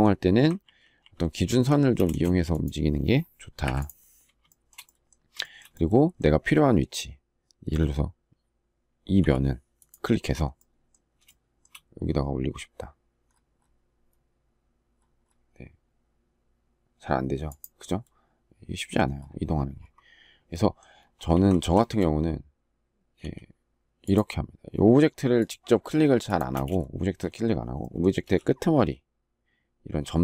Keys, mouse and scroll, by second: 0.4 ctrl+z, 3.3 Delete, 4.2 shift+middle click, 5.1 shift+middle click, 11.0 shift+middle click, 21.0 ctrl+z, 21.5 shift+middle click, 22.9 s, 26.2 space.